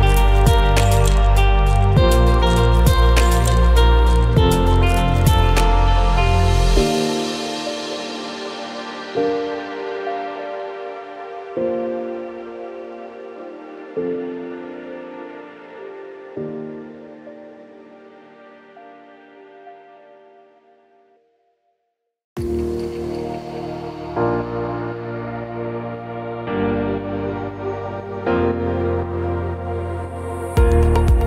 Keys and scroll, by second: 0.5 ctrl+-, 1.2 ctrl+=, 3.8 ctrl+shift+a, 5.0 ctrl+shift+a, 7.4 ctrl+shift+a, 8.9 ctrl+shift+a, 10.7 ctrl+shift+a, 13.0 ctrl+shift+a, 15.2 ctrl+-, 15.6 ctrl+=, 18.6 ctrl+shift+a, 20.9 ctrl+shift+a, 21.6 Delete, 22.9 Delete, 29.9 ctrl+shift+a, 30.8 ctrl+=.